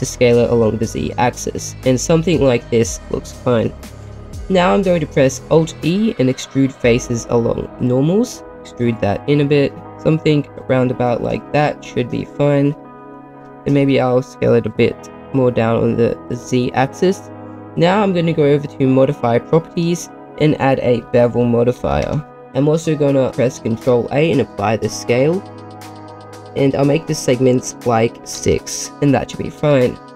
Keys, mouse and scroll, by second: 2.4 click, 2.7 middle click, 3.9-4.9 scroll up 2, 5.7 alt+e, 8.5 s, 9.8 ctrl+z, 9.8 alt+e, 9.8 middle click, 11.2 click, 11.5 Tab, 11.7-12.3 middle drag, 13.0 middle click, 13.6 s, 13.7 z, 16.3 click, 19.1 click, 19.9-22.3 drag, 22.3 middle click, 22.5-23.4 scroll up 1, 23.7 ctrl+a, 26.9-28.3 drag, 28.9 BackSpace.